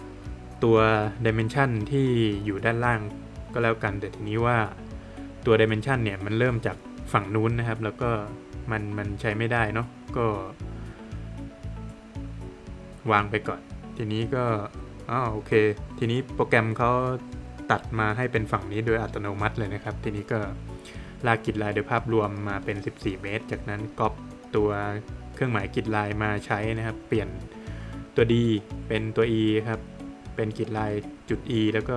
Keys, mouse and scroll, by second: 12.8 click, 13.6 Escape, 15.8 click, 17.5 click, 19.0 click, 19.7 Escape, 20.1 click, 22.9 space, 24.0 click, 25.6 click, 26.1 Escape, 26.9 click, 29.7 click, 30.7 shift+e.